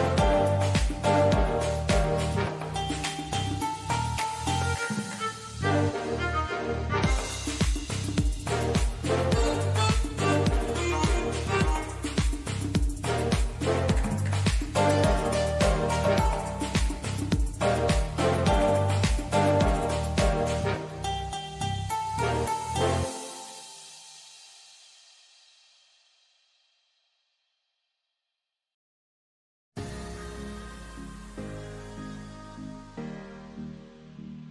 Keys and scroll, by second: 8.8 super+g, 10.9 super+d.